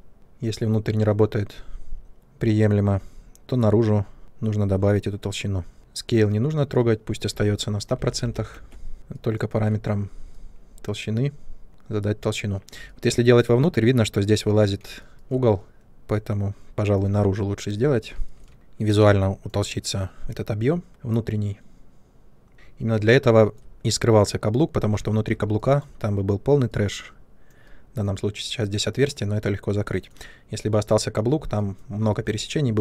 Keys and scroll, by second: 6.4 Delete, 7.9 typing.